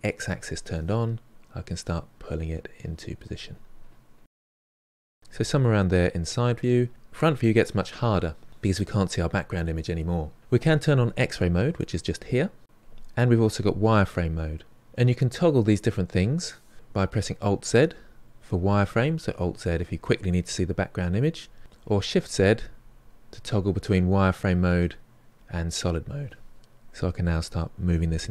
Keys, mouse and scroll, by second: 0.1-1.8 drag, 1.8 f, 2.1-5.1 drag, 5.1-6.9 middle drag, 6.9 KP_1, 11.9-13.6 drag, 14.7 click, 15.7 click, 17.1 alt+z, 17.6 alt+z, 17.8 alt+z, 18.6 alt+z, 19.2 alt+z, 19.8 alt+z, 20.2 alt+z, 21.8-24.1 typing, 25.3 shift+z, 25.8 shift+z, 26.5-28.3 drag.